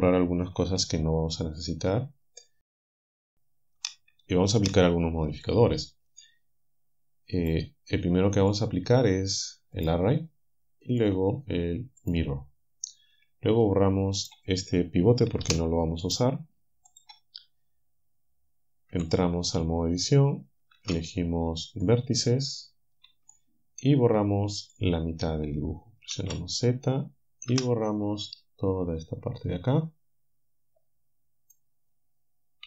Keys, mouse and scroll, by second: 4.2 click, 7.4 click, 8.4 click, 9.8 click, 11.0 click, 12.0 click, 14.2 click, 15.5 Delete, 19.0 Tab, 20.8 ctrl+Tab, 21.8 click, 23.3-26.2 shift+drag, 26.2 z, 27.6 b, 29.5-31.7 drag.